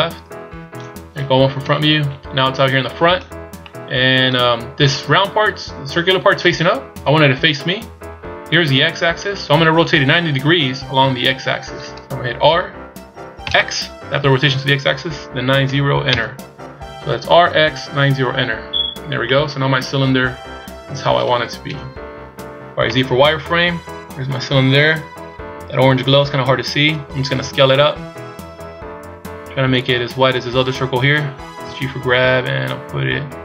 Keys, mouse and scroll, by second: 1.6 KP_1, 3.6 middle click, 6.8 KP_1, 12.4 r, 19.2 middle click, 21.6 KP_1, 22.8 z, 23.5-24.5 scroll up 1, 24.5 scroll up 1, 25.1 scroll up 1, 27.4 s, 31.5 g.